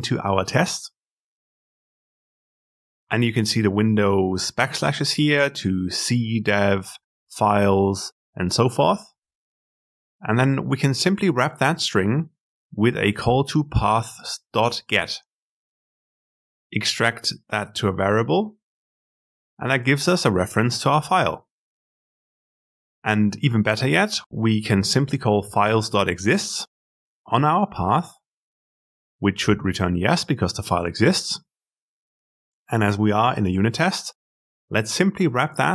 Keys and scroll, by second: 16.0 ctrl+alt+v, 33.5 alt+Return.